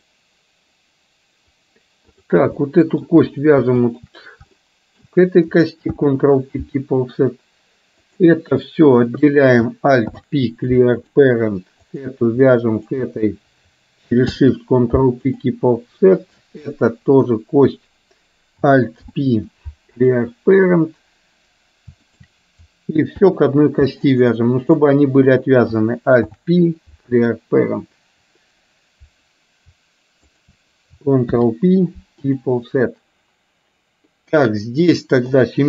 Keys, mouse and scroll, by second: 2.1 click, 2.6 shift+middle click, 3.8 shift+click, 4.7 shift+middle click, 5.9 ctrl+p, 10.1 alt+p, 12.8 shift+click, 14.3 ctrl+p, 16.2 click, 20.2 alt+p, 23.2 ctrl+p, 24.8 click, 26.2 alt+p, 30.3 shift+click, 31.6 ctrl+p, 34.3 click, 34.9 middle click.